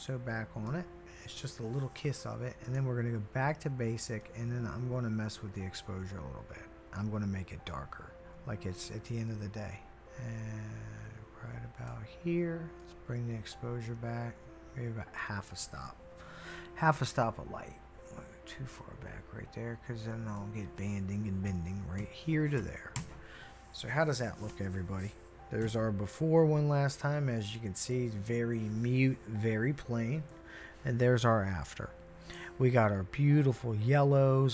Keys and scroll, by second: 21.5-23.0 typing, 25.6 \, 30.3 \.